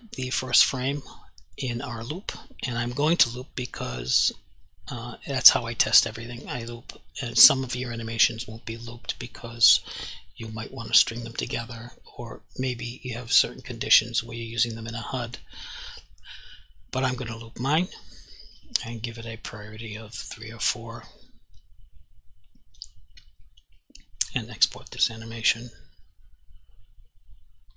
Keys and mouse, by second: 9.6 click, 11.0 click, 17.1 click, 19.9 click, 24.3 click.